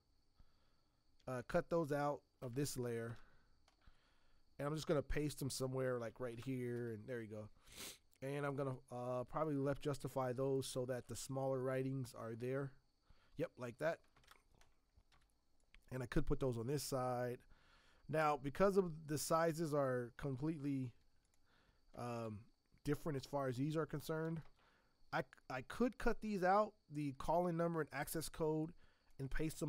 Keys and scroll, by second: 1.2 ctrl+x, 2.4 BackSpace, 3.1 ctrl+Return, 5.8 ctrl+v, 6.3 ctrl+Return, 14.2 ctrl+Return, 15.1 v, 20.3 t, 21.9 space, 22.1 space, 24.2 space, 24.4 space.